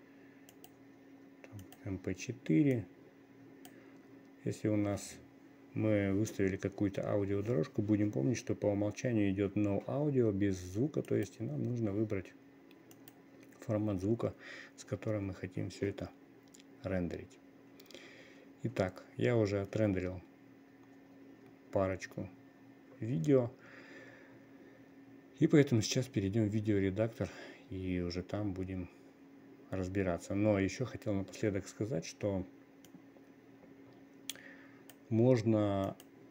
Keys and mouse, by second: 1.2-2.2 drag, 3.2-4.3 drag, 11.6-35.6 drag.